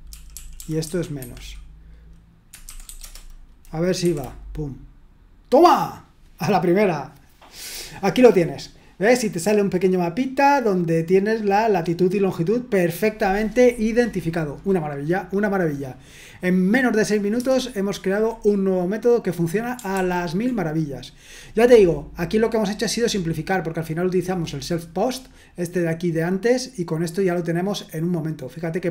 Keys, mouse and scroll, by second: 0.0-1.2 typing, 1.2 Escape, 2.4-3.4 typing, 4.0 F5, 17.3 Return, 20.0 ctrl+u.